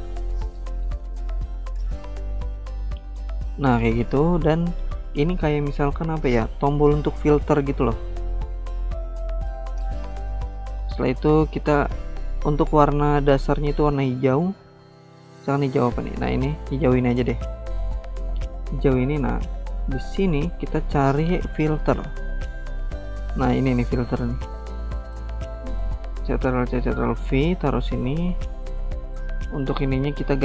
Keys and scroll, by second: 24.3 ctrl+c, 25.1 ctrl+v.